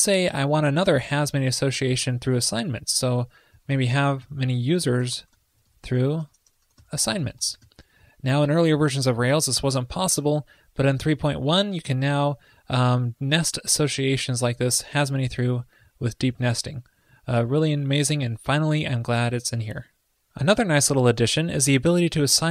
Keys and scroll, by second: 6.4 ctrl+l.